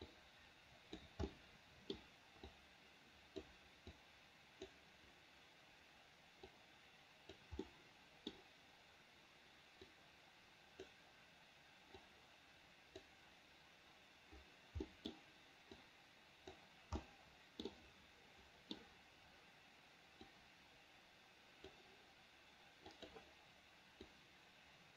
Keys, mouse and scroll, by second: 0.3 click, 1.5 middle click, 2.7 click, 4.2 click, 6.7 click, 7.8 middle click, 10.1-11.1 drag, 12.2-13.2 drag, 15.1 middle click, 16.0 click, 17.2 middle click, 17.9-19.0 middle drag, 20.5-21.9 drag, 23.2 click, 24.3-24.9 drag.